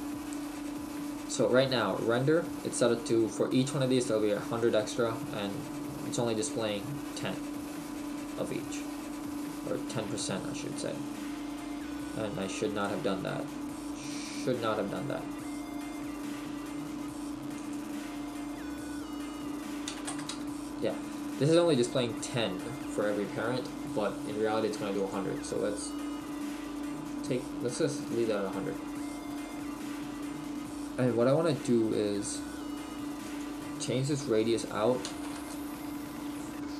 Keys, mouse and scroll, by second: 9.0 click.